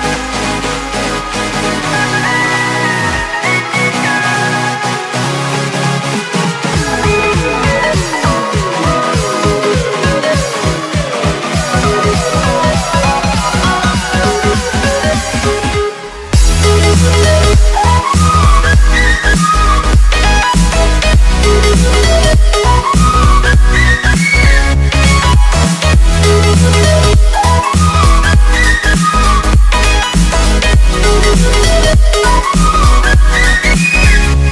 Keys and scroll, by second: 3.8 ctrl+space, 4.1 x, 7.4 ctrl+z, 7.5 x, 10.6 Escape, 15.1 z, 17.2 F6, 18.6 Escape, 19.4 F6, 21.2 z, 22.9 F7, 26.9 z, 28.9 x, 33.1 x.